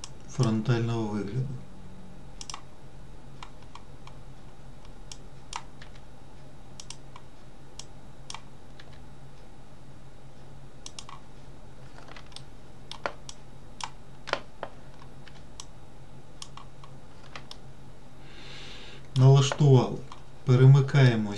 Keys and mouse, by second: 0.4 click, 5.5 click, 6.1 g, 8.1 click, 9.1 g, 12.7 shift+middle click, 13.7 click, 15.6 g, 17.9-19.5 middle drag.